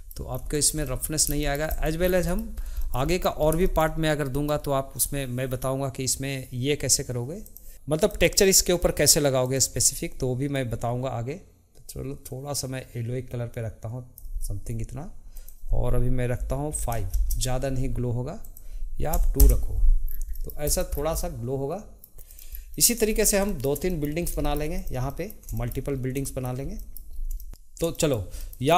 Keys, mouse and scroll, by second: 0.3 scroll down 1, 0.5-1.2 shift+middle drag, 1.2 scroll up 2, 1.4-1.7 shift+middle drag, 1.7 click, 2.0 scroll down 2, 2.2 middle drag, 2.5 scroll up 1, 2.8-3.4 shift+middle drag, 3.4 scroll up 1, 3.6-7.3 shift+middle drag, 7.4 click, 7.7-8.0 scroll up 10, 8.0 click, 9.4 click, 15.3-20.0 drag, 20.0 scroll down 2, 20.3-20.7 middle drag, 20.7 click, 20.9 scroll down 2, 21.2-22.2 middle drag, 22.2 click, 22.5 scroll down 2, 22.7-23.0 middle drag, 23.0-23.4 scroll up 3, 23.4-24.2 shift+middle drag, 24.2 scroll down 1, 24.4 shift+middle click, 24.7 click, 25.1-27.1 middle drag, 27.1 scroll up 1, 27.4-28.7 shift+middle drag.